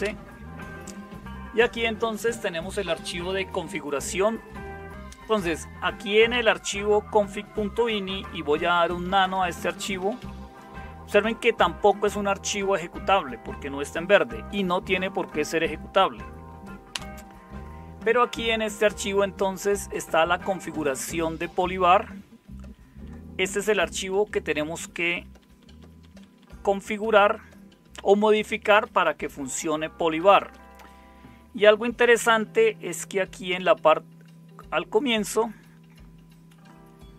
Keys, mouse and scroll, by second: 8.6-10.7 typing, 14.8 Tab, 16.9 Return, 21.0-22.6 Down, 23.0-24.1 Down, 24.6 Down, 24.8 Down, 25.0 Down, 25.2 Down, 25.6 Down, 25.8 Down, 26.0 Down, 26.1 Down, 26.4-28.1 Down, 28.4 Down, 28.6 Down, 28.8 Down, 29.0 Down, 29.2 Down, 29.4 Down, 29.6 Down, 29.7 Down, 29.9 Down, 30.5 Down, 31.5-37.1 Up.